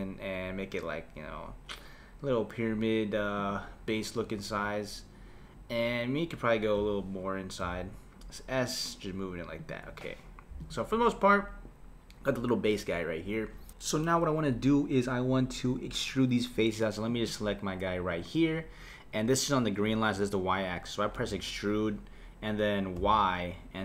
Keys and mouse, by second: 6.7 KP_7, 7.7 s, 10.6 click, 11.0 middle click, 17.1 click, 21.2 e.